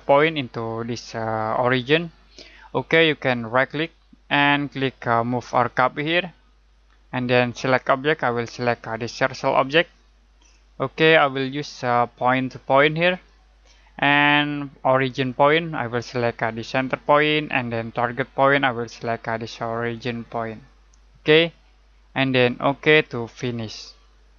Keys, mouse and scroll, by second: 3.4 right click, 8.2 click, 17.0 click, 20.4 click.